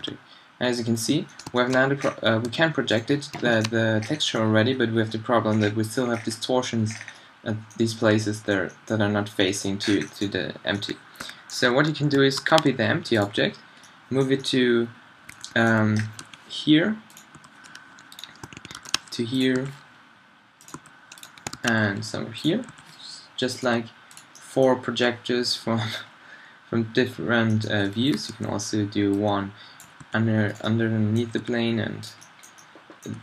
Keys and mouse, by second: 0.0 g, 1.1 click, 1.2 middle drag, 1.8 middle drag, 2.0-2.5 drag, 2.5 g, 3.1 right click, 3.7 right click, 4.1 right click, 4.4 middle drag, 5.6 middle click, 12.4 shift+d, 16.2 r, 17.4 g, 18.8 shift+d, 19.6 r, 20.8 g, 21.6 shift+d, 22.7 r, 30.0 r, 30.5-33.1 drag, 31.4 r, 33.1 r.